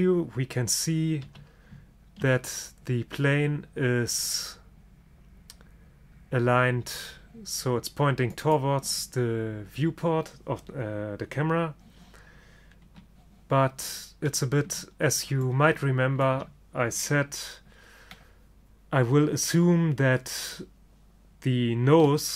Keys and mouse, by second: 1.3 g, 13.0 KP_3.